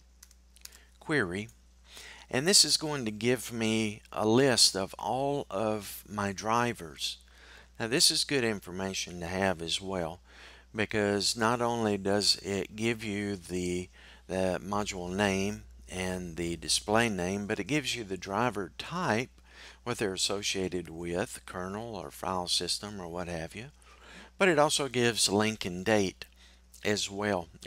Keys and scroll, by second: 1.9 typing.